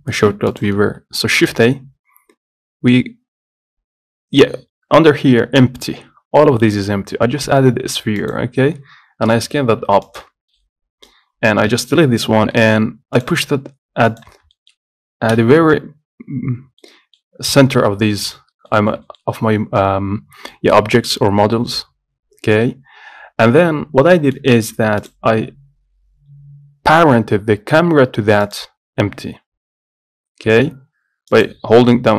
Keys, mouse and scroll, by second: 0.6 click, 0.8 shift+a, 1.6 shift+a, 10.6 scroll down 1, 10.7-11.8 middle drag, 11.8 Delete, 12.3 scroll up 1, 12.7 middle click, 13.3 click, 14.2 click, 14.7 shift+middle click, 15.4 KP_7, 17.0 middle click, 17.5 scroll down 2, 17.7-19.4 middle drag, 19.4-20.6 scroll up 2, 20.6 middle click, 21.0-21.7 scroll up 1, 21.7-22.8 middle drag, 22.8-24.3 scroll down 4, 24.3 shift+middle click, 25.1 click, 28.5 click, 29.1-31.4 middle drag, 31.4 click.